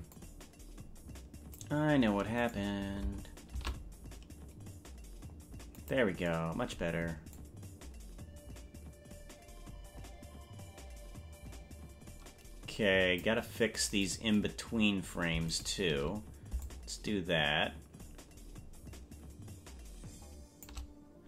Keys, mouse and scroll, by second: 0.3-1.8 drag, 2.5 right click, 3.7 shift+d, 7.5-13.4 drag, 14.3 right click, 15.7 shift+right click, 16.7-20.8 shift+drag.